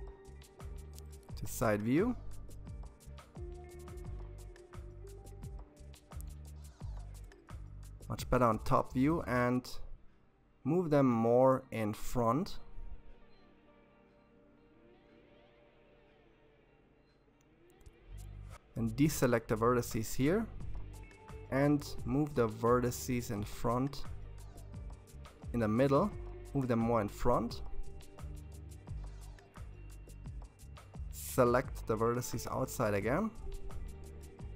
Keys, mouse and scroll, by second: 4.5 KP_7, 7.8 g, 16.9 c, 21.0 g, 25.8 KP_3, 28.7 c, 33.1 g.